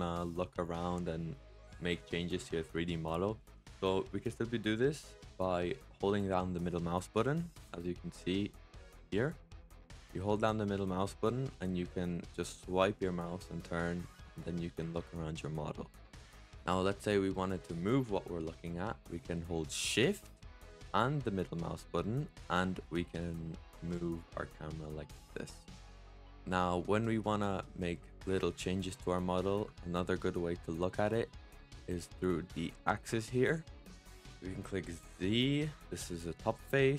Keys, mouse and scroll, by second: 7.1-12.7 middle drag, 21.0 shift+scroll up 1, 21.1-24.1 shift+middle drag, 26.1-27.1 shift+middle drag, 27.1-27.5 scroll up 2, 27.5-30.5 middle drag, 30.5-33.6 scroll down 1, 34.9 click.